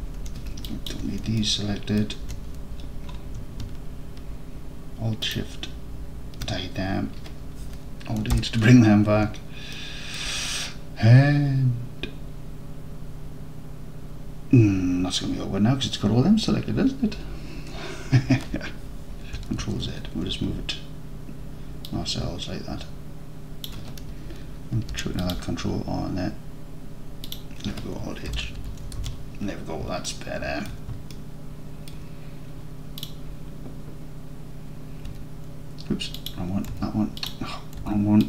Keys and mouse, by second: 0.7 ctrl+click, 1.4-1.9 alt+drag, 1.9 alt+middle click, 5.3 alt+shift+click, 8.4 alt+h, 9.8 alt+click, 10.1 alt+click, 19.7 ctrl+z, 22.0-23.7 drag, 24.8 ctrl+r, 27.3-27.9 drag, 28.4 alt+h, 28.7 Tab, 29.0 alt+z, 30.1 alt+click, 31.2 alt+click, 31.3 alt+click, 31.9 alt+click, 36.2 click, 36.8 Tab, 37.3-37.9 drag, 37.9 Tab.